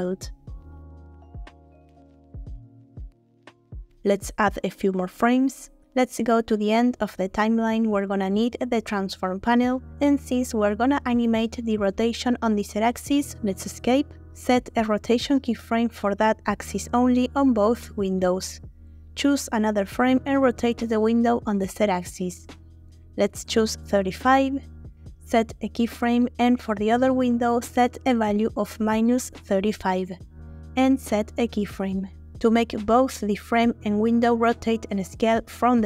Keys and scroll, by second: 5.3-6.1 typing, 10.2 r, 10.3 z, 13.8 Escape, 20.3 r, 20.5 z, 23.7 typing, 24.2 Return, 27.1 r, 27.2 z, 29.5 5, 29.7 Return, 33.8 shift+a.